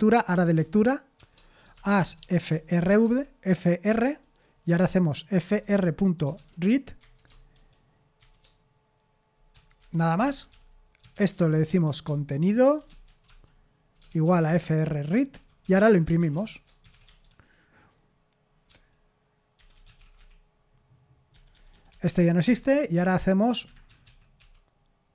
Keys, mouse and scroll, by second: 1.2-3.0 typing, 3.9 Return, 4.6-8.2 typing, 9.5-24.4 typing, 9.8 Escape, 14.5 Escape.